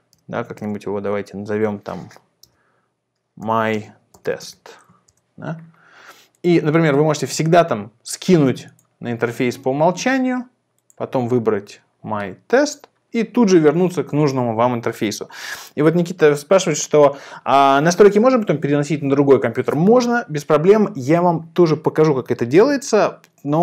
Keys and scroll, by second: 0.2 0, 0.5 BackSpace, 2.4-5.0 typing, 5.0 Return.